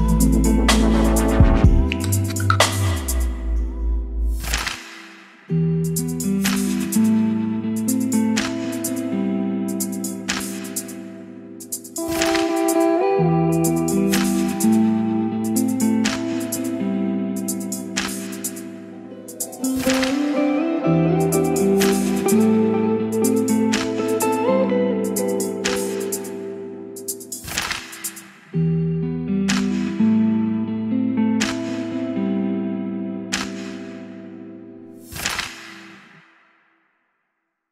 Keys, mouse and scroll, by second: 1.1 2, 2.2-3.8 typing, 4.9 shift+3, 5.9 shift+f, 7.5-10.6 drag, 10.6 Return, 12.9-18.4 drag, 18.4 F5, 18.6-19.9 drag, 19.9 F5, 29.0-37.7 drag.